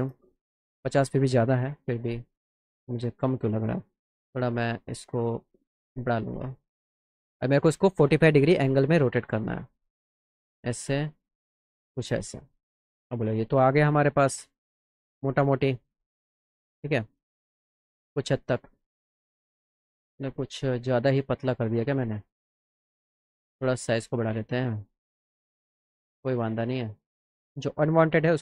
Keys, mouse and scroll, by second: 1.8 click, 2.6-4.1 drag, 5.2-6.5 drag, 8.6 click, 9.5 click, 10.2-12.1 drag, 12.4 middle click, 13.1 middle click, 14.0 middle click, 18.4 click, 20.9 click, 25.0 alt+click, 26.1 alt+click, 27.2 click.